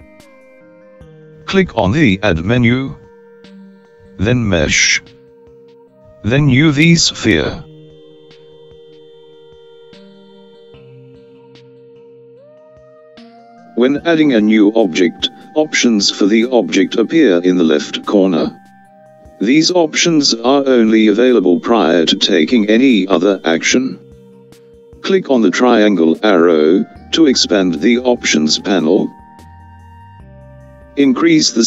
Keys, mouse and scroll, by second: 2.0 click, 28.0-31.6 drag.